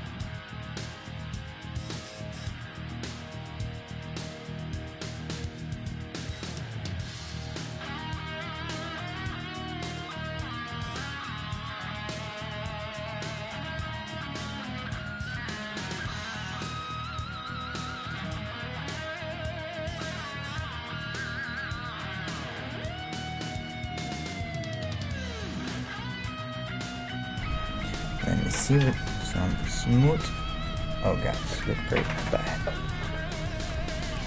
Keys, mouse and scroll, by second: 0.6-7.1 middle drag, 4.6-6.0 right drag, 5.8 g, 6.8-9.4 right drag, 6.9 g, 8.2-11.9 middle drag, 10.0 g, 11.0 g, 11.4-12.5 right drag, 12.5 middle click, 12.9 g, 14.0 middle click, 14.2 g, 14.6 right click, 15.3 g, 16.5 g, 17.9 g, 18.2-19.3 right drag, 20.4 Tab, 21.1-23.5 middle drag, 24.1-26.5 middle drag, 27.4 \, 27.8-32.6 middle drag, 29.5 ctrl+2.